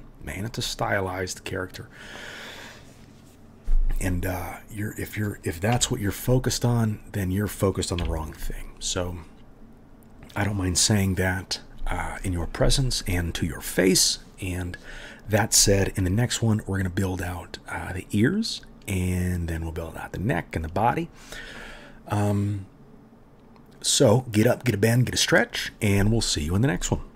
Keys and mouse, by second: 5.7 KP_Decimal, 7.2 click, 7.3-27.1 middle drag, 8.0 KP_3.